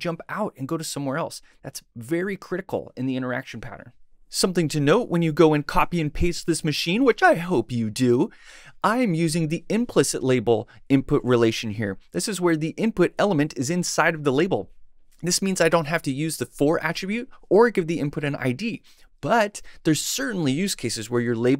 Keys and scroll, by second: 0.5 shift+Right, 0.6 shift+Tab, 1.1 shift+Left, 1.7 Tab, 2.1 Left, 3.0 Left, 3.0 Tab, 3.9 shift+super+Tab.